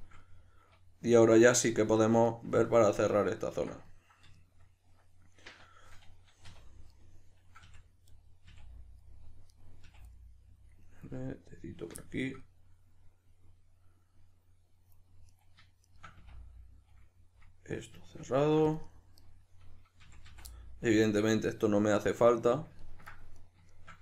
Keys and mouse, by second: 6.4 2, 6.9 right click, 7.0-8.1 middle drag, 7.6 f, 8.1 right click, 8.2-9.5 middle drag, 8.5 f, 9.5 right click, 9.6-15.3 middle drag, 9.9 f, 15.3 right click, 15.4-15.9 middle drag, 15.9 shift+right click, 16.2 f, 19.2 right click, 20.1 f, 20.5-23.4 middle drag, 23.4 right click, 23.7 shift+right click.